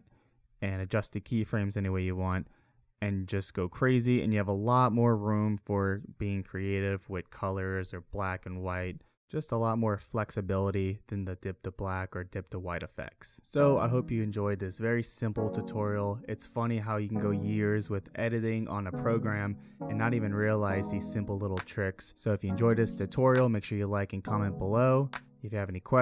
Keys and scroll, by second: 2.3 space, 3.7 space.